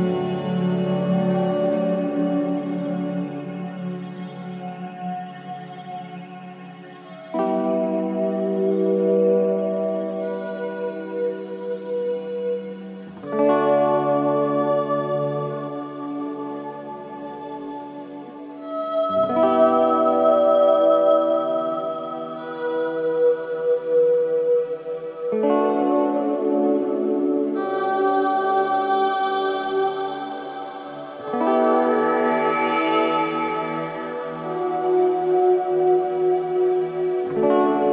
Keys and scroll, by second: 4.0 F3, 4.4 Escape, 5.5 F2, 13.0 space, 15.8 ctrl+q, 18.6 space, 19.2 F2, 21.9 Escape, 23.8 space, 30.0 g, 36.4 space, 37.1 Escape.